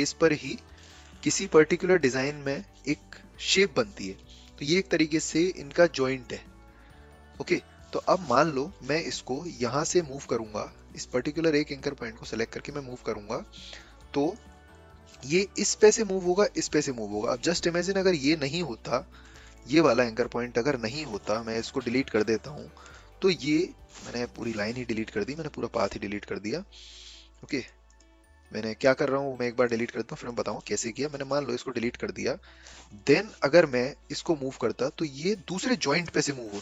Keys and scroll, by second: 21.4 a, 24.1 Delete, 24.5 ctrl+z, 33.1 a.